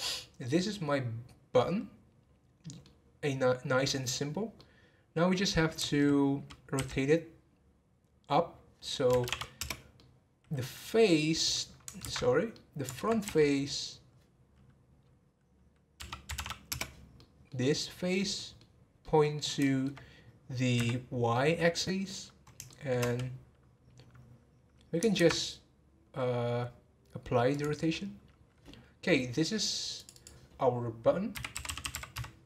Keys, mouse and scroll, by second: 4.5-6.7 middle drag, 6.7 r, 10.0-12.0 middle drag, 12.0 ctrl+z, 12.5-13.2 middle drag, 13.2 r, 17.2-19.6 middle drag, 21.3-23.8 middle drag, 23.8 scroll up 1, 25.1 ctrl+a, 28.0-29.1 scroll down 1, 29.1-29.9 scroll down 2, 29.9-31.8 drag, 31.8 t.